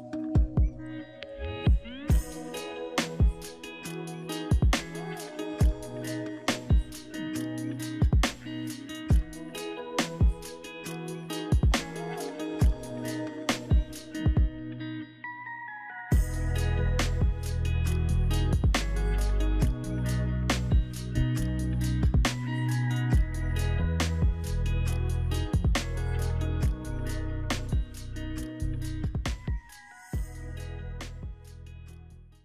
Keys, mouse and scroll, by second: 25.0 double click, 25.7 right click, 31.5 right click.